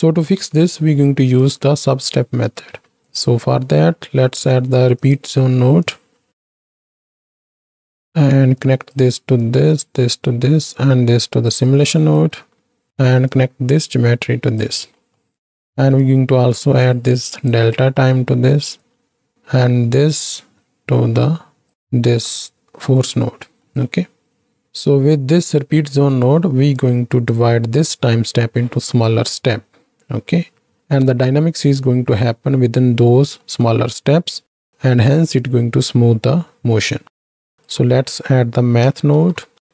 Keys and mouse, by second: 2.7 shift+a, 6.5 click, 6.7 click, 7.1-7.6 drag, 7.8 click, 8.6 click, 9.4 click, 10.8-11.5 drag, 11.9 right click, 12.4 right click, 13.3-14.6 drag, 15.0 middle click, 16.0-17.5 drag, 17.9 middle drag, 18.8-21.7 drag, 22.2 middle click, 23.7 middle click, 24.6 middle click, 26.0 middle click, 26.7 click, 33.5 middle click, 37.0 shift+a.